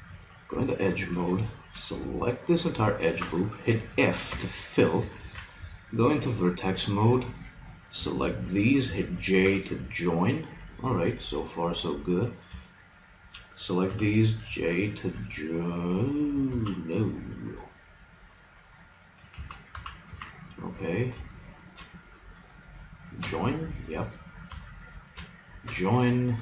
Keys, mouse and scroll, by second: 0.7-2.6 middle drag, 2.7-4.3 drag, 4.3 right click, 4.3 f, 5.3 ctrl+Tab, 6.5-7.7 middle drag, 7.7 right click, 8.3-10.1 right drag, 9.5 j, 10.1-11.9 middle drag, 13.9 j, 16.5 ctrl+z, 19.5 ctrl+z, 19.7 ctrl+z, 20.1 ctrl+z, 20.9-23.3 right drag, 23.3 j, 24.3-26.4 right drag, 25.7 j.